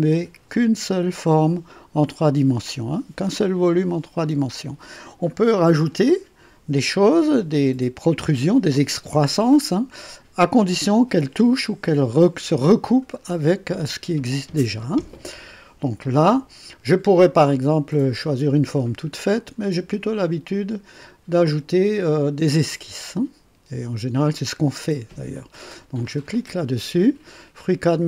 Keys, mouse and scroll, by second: 17.6 click, 19.2 click, 26.0 click.